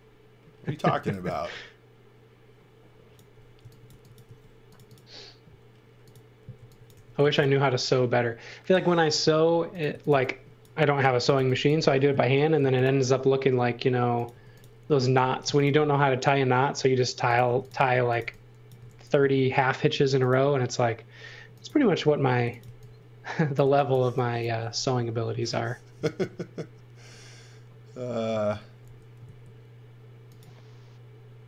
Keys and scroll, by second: 0.8 x, 1.1 v, 3.6 x, 3.9 v, 4.2 space, 6.5 x, 6.9 m, 9.6-12.3 typing, 14.3 space, 15.2 m, 17.4-19.2 typing, 22.1-23.9 typing, 28.8 s.